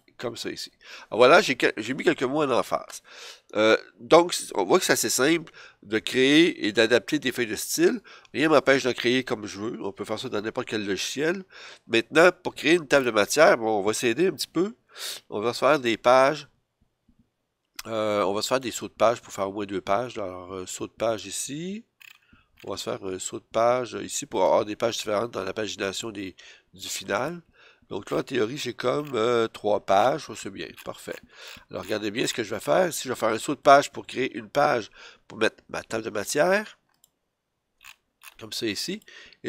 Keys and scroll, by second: 0.3 F7.